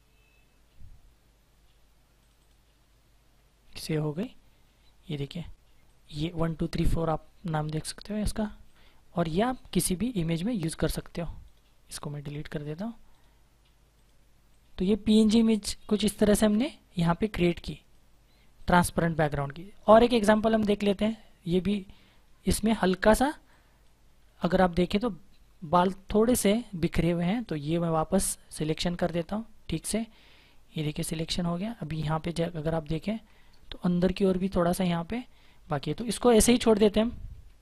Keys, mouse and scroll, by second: 2.1 click, 3.6 click, 6.3 click, 8.4 right click, 9.0 click, 10.3 right click, 11.5 click, 22.5-25.0 scroll down 1, 26.6 click, 32.5 ctrl+=, 32.9 space.